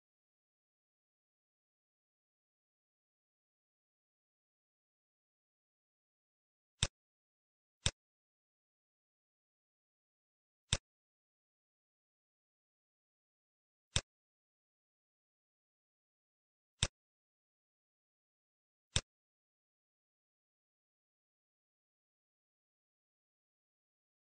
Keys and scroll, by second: 0.5 i, 2.0-4.3 typing, 12.2 Return, 14.5 ctrl+s.